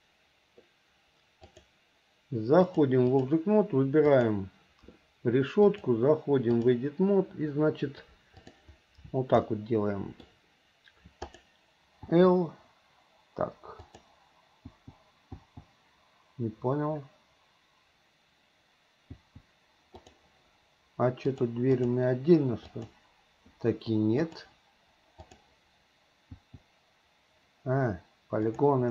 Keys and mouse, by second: 1.6 click, 2.8 click, 4.2 click, 5.8-6.9 drag, 8.7 click, 9.6 middle click, 12.2 l, 14.0 click, 14.8 l, 15.5 l, 19.3 l, 20.1 click, 21.7 click, 22.9 click, 24.4-25.6 drag, 26.5 l, 28.6 click.